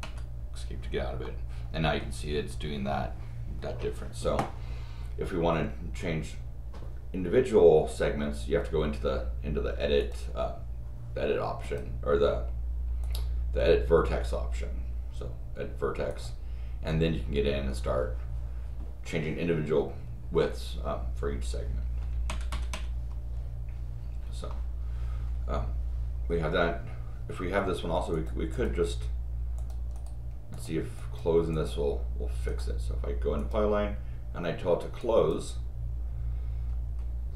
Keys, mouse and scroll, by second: 0.0 Escape, 1.2 middle click, 10.0 click, 11.6 click, 13.0 click, 16.1 click, 24.6 middle click, 28.1 click, 28.5 click, 29.6 click, 29.9 right click, 30.5 click, 31.0 click, 31.5 click, 32.5 right click, 33.4 click, 35.0 click, 36.8 scroll down 2.